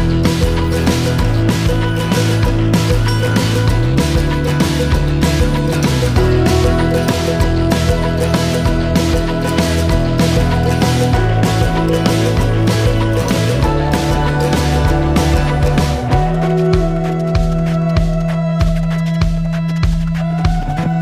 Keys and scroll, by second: 9.6 ctrl+s, 19.0 ctrl+z.